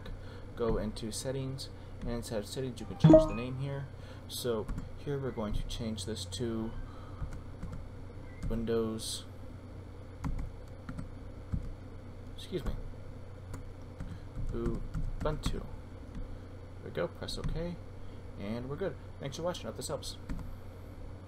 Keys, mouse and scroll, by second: 1.0 click, 3.4 click, 4.7 BackSpace, 7.0-8.4 typing, 10.2 d, 10.9 o, 11.5 w, 12.7-17.7 typing, 17.8 click, 20.3 F9.